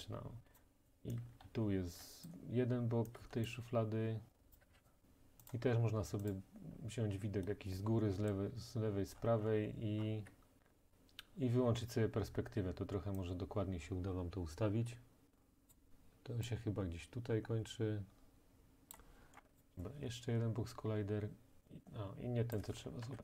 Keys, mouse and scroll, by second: 0.6 click, 1.5-2.1 typing, 2.3 click, 3.3-5.1 typing, 3.5 click, 4.5 right click, 4.8 right click, 6.3 right click, 6.7-8.1 scroll, 8.1-8.9 scroll, 8.9-10.0 scroll, 10.0-10.7 scroll, 10.2 f, 15.7 click, 18.9 click, 19.4 click, 19.4 scroll, 19.6 click, 22.6 click, 23.1 ctrl+z.